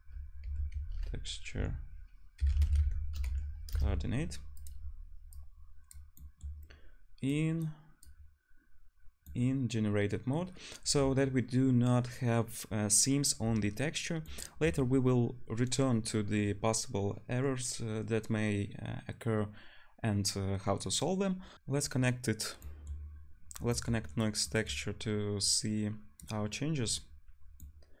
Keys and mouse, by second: 5.3-21.5 drag, 5.3 t, 25.5-28.0 drag.